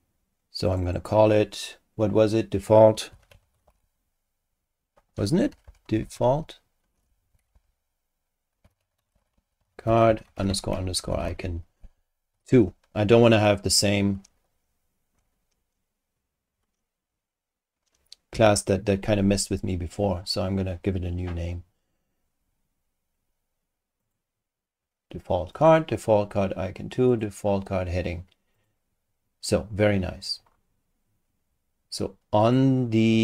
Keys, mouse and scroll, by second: 0.7 click, 2.8-4.3 typing, 5.5 shift+Home, 5.6 shift+Delete, 5.7-6.5 typing, 7.4 shift+Home, 7.5 shift+Delete, 8.4-12.3 typing, 18.3 Return, 24.0 click, 25.5 click, 27.1 click, 28.5 click, 32.4 click.